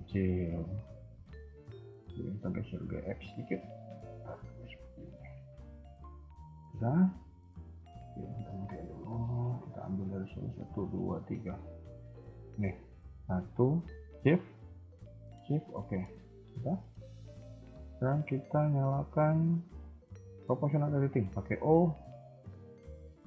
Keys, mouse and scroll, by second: 1.9 g, 3.5 r, 5.6 scroll down 1, 5.8 middle click, 6.8 KP_1, 6.9 KP_3, 8.2 click, 8.6 scroll up 3, 8.9 shift+middle click, 9.9 click, 10.5 shift+click, 11.3 shift+click, 11.5 scroll up 2, 11.7 a, 11.8 a, 12.0-12.5 scroll down 2, 12.5-13.0 scroll up 2, 13.1 click, 14.4 click, 15.5 click, 15.6 KP_1, 16.0 scroll down 1, 16.3 shift+middle click, 16.6-17.1 scroll down 3, 17.1 shift+middle click, 17.4-18.7 scroll up 2, 20.6 o.